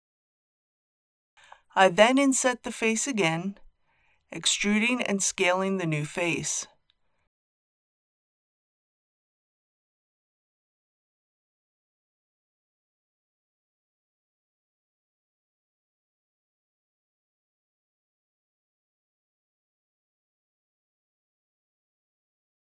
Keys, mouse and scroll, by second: 0.1 KP_7, 1.4 i, 6.0 click, 9.1-10.8 middle drag, 10.8-11.3 scroll up 1, 13.8 click, 14.5 click, 15.3 shift+z, 18.3 click.